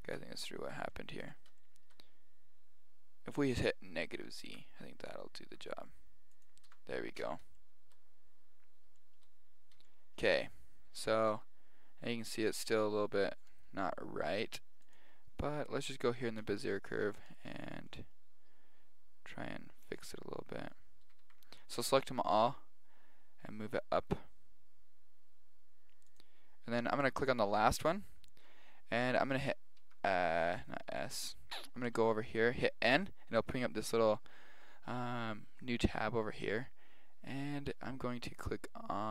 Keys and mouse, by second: 0.1 Tab, 0.9-3.2 middle drag, 3.5 click, 4.5 Tab, 5.5 g, 6.7 Tab, 7.6 middle drag, 7.8 middle click, 11.3-11.7 middle drag, 11.3 g, 14.9 click, 16.4 Tab, 17.3 right click, 17.5 g, 21.1 a, 21.2 a, 22.3 g, 27.0 right click, 29.8 s, 31.9 n, 33.7-35.9 middle drag.